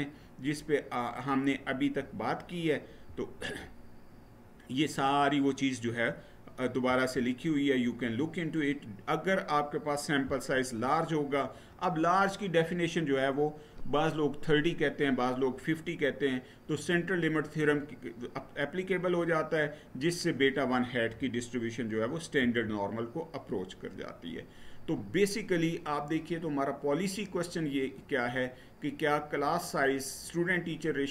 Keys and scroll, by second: 2.9 Right, 6.6 Right, 22.1 Right.